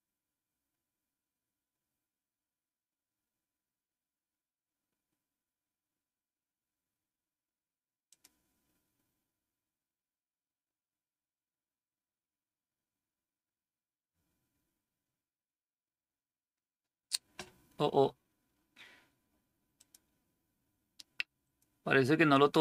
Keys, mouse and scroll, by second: 8.0 click, 19.6 click, 21.3 click.